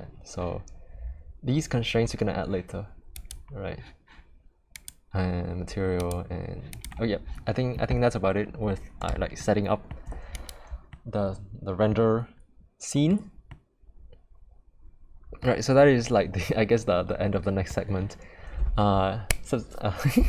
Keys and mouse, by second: 3.2 click, 4.7 click, 6.0 click, 6.7 click, 9.3-9.9 shift+middle drag, 10.9-11.9 middle drag, 13.4-15.4 middle drag, 16.5-17.7 middle drag.